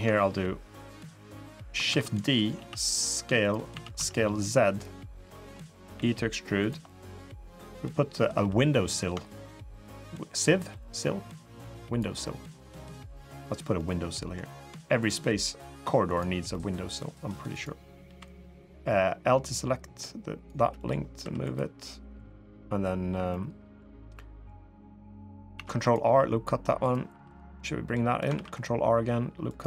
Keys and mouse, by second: 1.8 shift+d, 2.3 s, 3.5 s, 4.8 click, 5.3 middle click, 5.7 e, 6.6 middle click, 8.1 3, 9.0 shift+click, 9.6 click, 10.7-12.0 drag, 12.0 middle click, 13.5 middle click, 15.9 click, 16.3 middle click, 17.3 click, 17.8 l, 18.6-20.2 drag, 20.6 middle click, 21.0 3, 22.0 click, 23.1 middle click, 23.9 middle click, 25.3 ctrl+r, 26.8 3, 27.3 click, 27.4 middle click, 28.1 ctrl+r, 29.5 3.